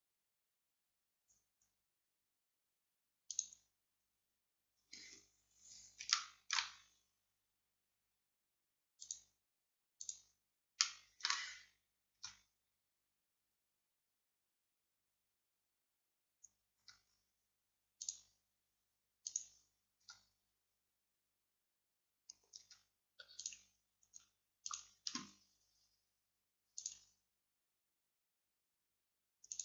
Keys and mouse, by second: 6.2-9.1 middle drag, 9.1-10.9 drag, 12.2 Tab, 16.9 Tab, 20.1 Tab, 22.7 Tab.